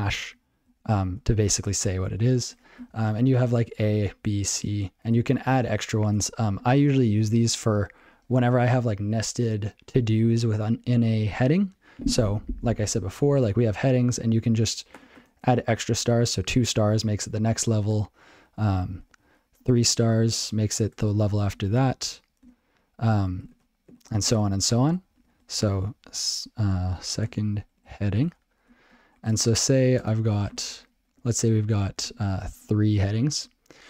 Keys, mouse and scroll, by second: 1.2 ctrl+f, 3.1 shift+Up, 3.6 shift+Up, 4.1 shift+Up, 5.1 shift+Up, 7.3 ctrl+alt+b, 7.4 ctrl+alt+k, 15.2 *, 16.0 space, 19.1 *, 19.2 *, 19.6 space, 26.7-28.8 typing, 28.9 ctrl+g, 31.6 ctrl+p.